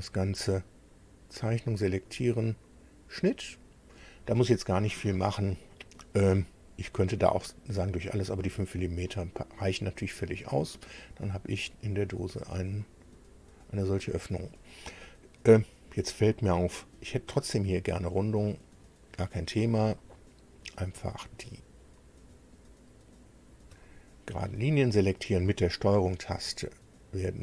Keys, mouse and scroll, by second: 1.5 click, 3.2 click, 9.0-12.5 middle drag, 12.8-14.1 middle drag, 14.7-15.3 scroll up 2, 15.5 scroll down 1, 16.3 middle click, 19.4 click, 19.9-21.1 middle drag, 23.4 ctrl+click, 23.8-25.5 ctrl+middle drag.